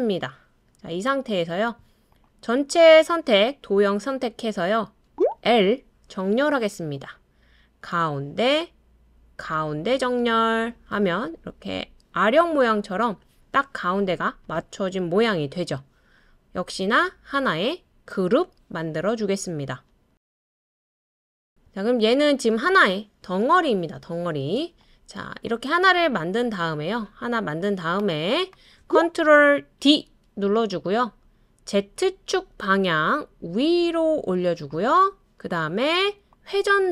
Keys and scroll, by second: 5.5 typing, 29.8 super+d.